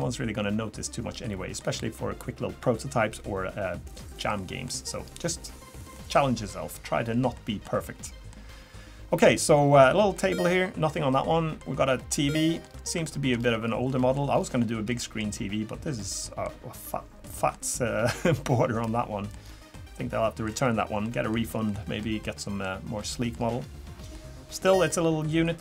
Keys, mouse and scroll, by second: 0.0 middle click, 4.3 middle click, 4.9 scroll down 1, 5.9 middle click, 7.3 middle click, 9.5 middle click, 10.1 middle click, 12.6 scroll up 3, 13.0 shift+middle click, 13.3 scroll up 4, 13.9 middle click, 14.3 scroll down 2, 14.9 middle click, 14.9 scroll down 1, 16.5 middle click, 17.3 middle click, 18.8 middle click, 19.4 scroll down 3, 19.7 middle click, 21.1 middle click, 21.7 middle click, 22.2 middle click, 23.0 middle click, 23.5 scroll down 1, 24.1 middle click, 25.4 middle click.